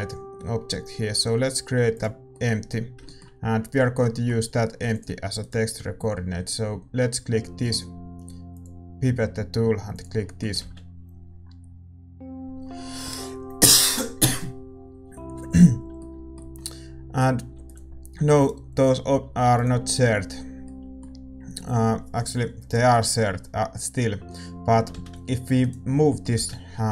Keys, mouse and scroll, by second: 1.9 shift+a, 5.4 ctrl+s, 5.4-9.1 middle drag, 5.4-9.1 right drag, 9.1-11.9 drag, 11.9-13.8 middle drag, 11.9 shift+z, 21.0 ctrl+s, 21.0-22.7 middle drag, 25.1 shift+z, 25.8-26.9 right drag.